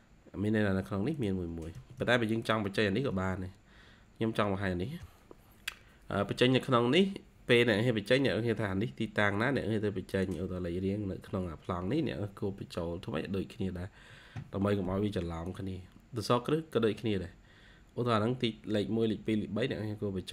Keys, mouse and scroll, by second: 1.7 Escape, 1.9 Escape, 3.0 Escape, 3.4-4.0 scroll down 1, 8.2-9.4 scroll up 2, 11.1 scroll up 1, 16.4-17.8 scroll up 2, 17.9-18.9 scroll up 3, 19.7-20.3 scroll down 1.